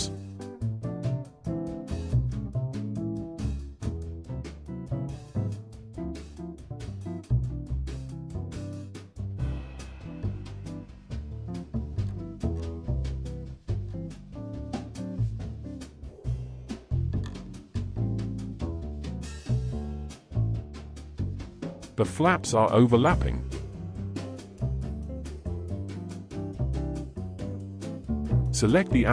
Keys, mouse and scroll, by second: 4.7 click, 5.1 r, 6.7-7.5 middle drag, 8.5 click, 8.9 r, 10.1 click, 10.3 r, 11.5-15.3 middle drag, 15.3 scroll up 3, 15.6-16.8 shift+middle drag, 17.0-18.2 drag, 18.2-19.4 scroll down 3, 19.4 n, 19.8-20.4 scroll down 2, 20.4-21.4 shift+middle drag, 21.4 space, 23.4 space, 24.3-27.3 drag.